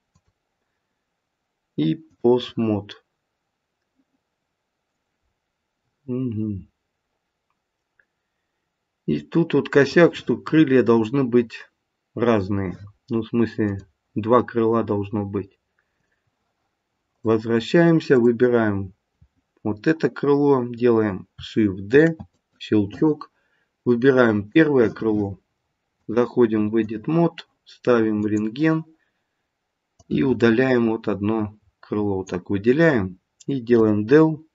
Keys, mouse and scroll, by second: 0.1 click, 5.2-6.3 scroll up 2, 6.3-8.2 scroll down 1, 8.2-9.4 scroll down 1, 13.6 click, 17.0 click, 18.1 click, 21.9 shift+d, 24.4 click, 25.9 click, 29.9 click, 33.7 Delete.